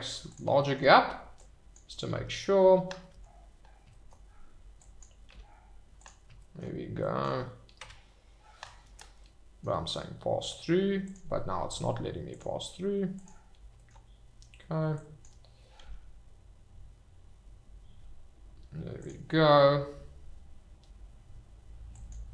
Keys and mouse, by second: 0.3 click, 1.4 click, 2.1 g, 3.1 Escape, 4.8 click, 5.1 e, 5.3 g, 6.0 click, 7.8 Tab, 9.2 middle click, 11.0 click, 12.3 click, 13.2 click, 14.9 click, 15.8 g, 19.0 click, 21.9 click.